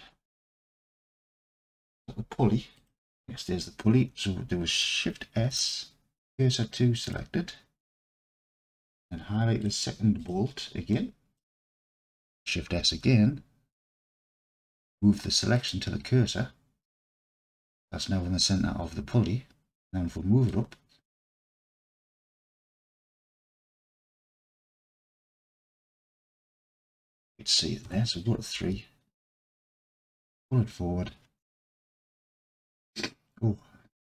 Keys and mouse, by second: 2.8 click, 5.4 shift+s, 10.2-11.4 drag, 12.8 shift+s, 20.6-24.4 drag, 24.6 alt+z, 25.4-27.1 alt+drag, 28.3 KP_3, 28.6 alt+z, 30.1-34.1 drag.